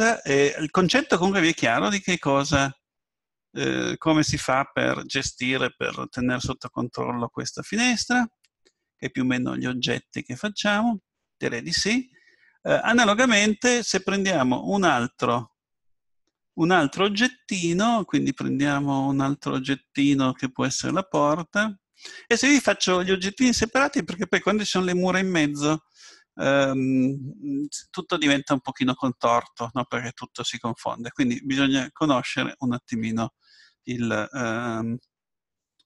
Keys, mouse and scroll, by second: 6.1-9.7 middle drag, 12.2-14.4 middle drag, 20.9-21.9 drag, 27.1-30.3 middle drag.